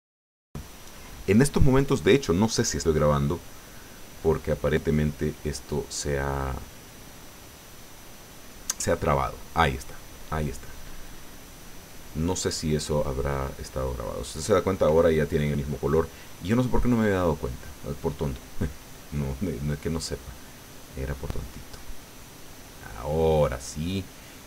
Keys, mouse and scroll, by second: 12.8 scroll down 2, 13.7-14.1 scroll up 2, 19.0 click, 19.7-24.2 drag, 24.2 click, 24.3 middle click.